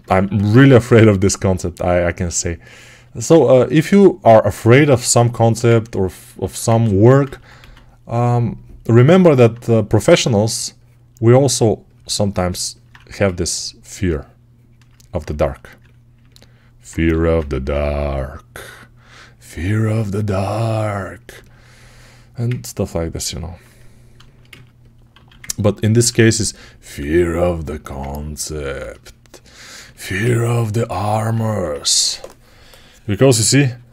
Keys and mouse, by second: 0.1 1, 7.4 2, 12.8 1, 14.7-17.6 alt+right drag, 17.0 g, 25.0 alt+q, 25.9 1, 26.9-30.6 ctrl+drag, 30.6-33.9 alt+right drag.